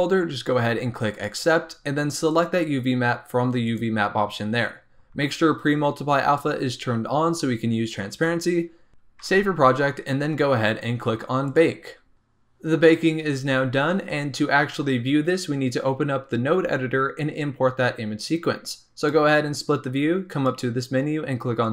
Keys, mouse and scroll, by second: 2.3-5.2 drag, 5.2-6.5 scroll down 3, 9.2 ctrl+s, 11.4 click, 13.9-15.2 scroll down 3, 15.2-17.3 scroll down 1, 17.3-21.7 drag.